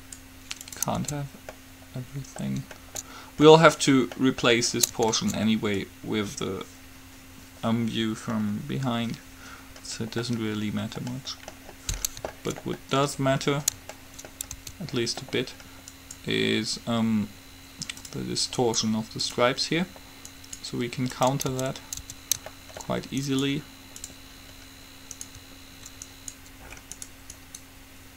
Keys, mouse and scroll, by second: 1.2 Tab, 1.7 middle click, 6.3-7.5 middle drag, 9.8-11.0 middle drag, 14.8 Tab, 16.1-18.0 right drag, 18.8 right click, 21.6 Tab, 22.2 Tab, 23.5 click, 27.1-28.1 middle drag.